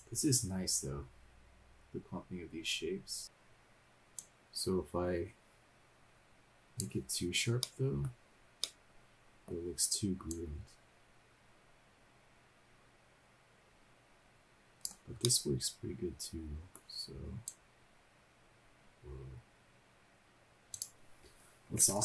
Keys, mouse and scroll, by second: 4.2-6.8 drag, 7.2-7.5 scroll up 1, 7.5 middle click, 8.1-8.6 scroll down 2, 8.6 middle click, 10.3-15.1 drag, 15.2-16.7 middle drag, 17.4-20.6 drag, 20.6 middle click, 20.6 scroll down 1, 20.7 click, 21.4 scroll up 1.